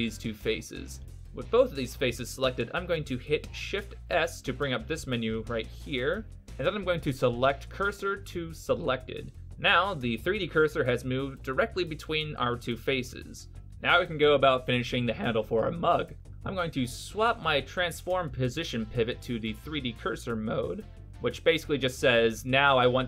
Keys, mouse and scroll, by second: 2.3 middle click, 3.2 middle click, 3.7 shift+s, 6.8 middle click, 12.0 KP_1, 17.4 click, 21.8 middle click.